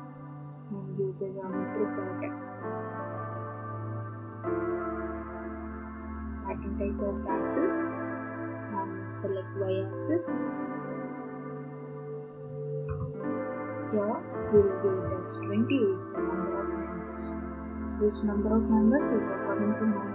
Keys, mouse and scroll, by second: 1.4 click, 2.5 click, 5.2 click, 6.2 click, 9.7 click, 11.9 click, 12.9 BackSpace, 14.4-14.9 typing.